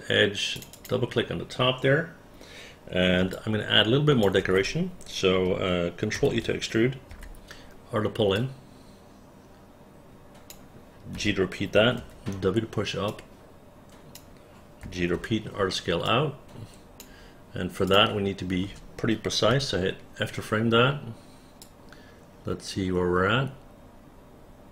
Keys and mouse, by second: 0.7 click, 3.4 alt+click, 6.3 ctrl+e, 7.2 r, 8.5-10.6 drag, 11.3 g, 12.1 w, 13.2-14.3 drag, 14.9 g, 15.3 r, 16.2 click, 18.0 click, 18.7 space, 19.7 f, 21.7-24.7 drag.